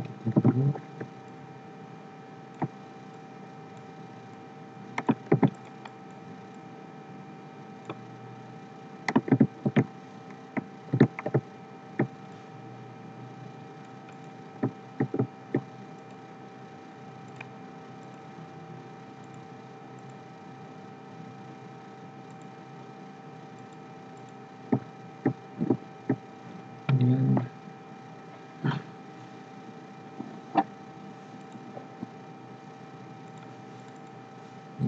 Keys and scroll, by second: 0.6 ctrl+g, 5.3 ctrl+z, 9.3 ctrl+c, 9.6 ctrl+g, 10.9 ctrl+v.